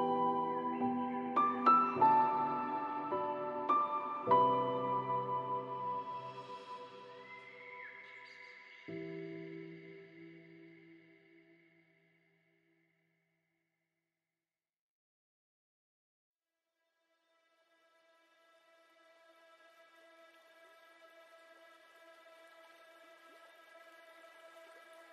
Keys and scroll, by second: 3.2 shift+F6, 10.7 ctrl+z, 13.4 ctrl+shift+i, 15.1 ctrl+z.